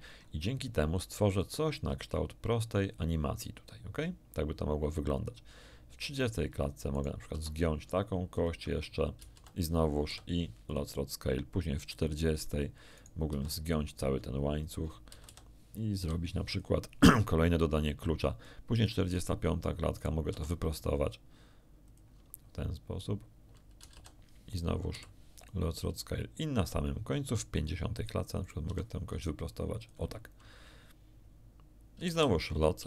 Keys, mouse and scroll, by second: 1.3-6.4 drag, 6.9 right click, 7.3 r, 8.3 ctrl+click, 9.1 ctrl+a, 9.3 ctrl+a, 10.0 ctrl+i, 10.7 ctrl+click, 11.5 ctrl+click, 12.9 right click, 13.3 r, 14.6 ctrl+click, 15.1 a, 15.2 a, 15.9 i, 16.5 ctrl+click, 18.4 click, 19.9 middle click, 20.3 r, 21.8 ctrl+click, 23.7 a, 23.9 a, 25.3 click, 25.3 i, 27.2 click, 28.4 middle click, 28.6 r, 29.7 ctrl+click, 31.9 a, 32.1 a, 32.7 i.